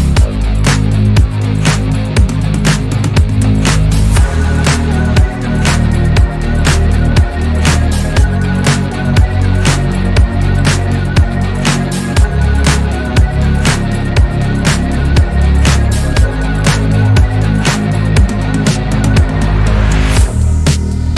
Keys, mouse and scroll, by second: 0.0 click, 1.6 Tab, 1.8 scroll down 2, 2.2 scroll up 2, 2.6 Tab, 3.4-3.9 scroll up 1, 3.9 click, 4.6 s, 5.9 click, 7.1 click, 8.1 s, 9.0 click, 9.3-9.8 scroll down 1, 9.8 click, 10.2 click, 11.6 shift+middle click, 12.0 click, 13.8 1, 14.2 click, 14.8 click, 16.5 ctrl+z, 17.3 click, 18.0 ctrl+r, 19.0 click, 19.6 shift+click, 20.2 click.